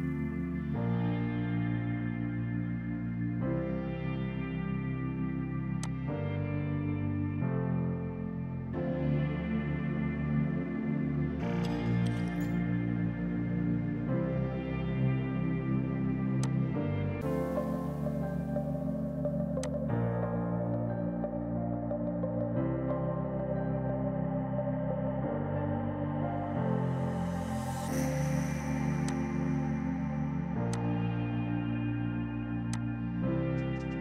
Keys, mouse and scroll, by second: 5.9 click, 12.6 typing, 16.5 click, 16.5 typing, 19.7 click, 19.7 typing, 24.1 space, 29.1 click.